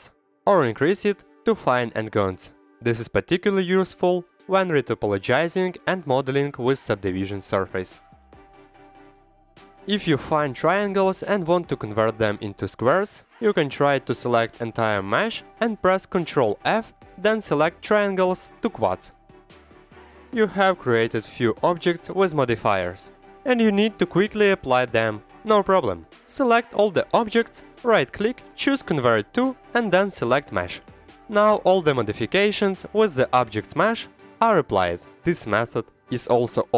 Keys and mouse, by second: 1.6 click, 1.9 click, 2.5 click, 2.6 click, 3.2 click, 3.4 click, 3.8 click, 4.6 click, 4.9 click, 5.3 click, 5.5 click, 5.7 click, 6.1 click, 6.2 click, 6.9 click, 7.1 click, 7.8 click, 8.5 middle click, 9.4-10.5 drag, 10.5 right click, 11.0 middle click, 11.6 right click, 11.9 middle click, 13.1 middle click, 13.8 middle click, 14.5 a, 15.8 ctrl+f, 18.3 click, 18.6-20.0 middle drag, 22.0 click, 22.5 click, 23.1 ctrl+z, 23.2 ctrl+z, 23.7 click, 24.9-25.4 drag, 26.5-31.3 right drag, 32.6 click, 33.8 Tab, 34.3 middle click, 34.4 click, 34.7 middle click, 34.9 click, 35.7 Tab, 36.1 click, 36.3-36.7 drag.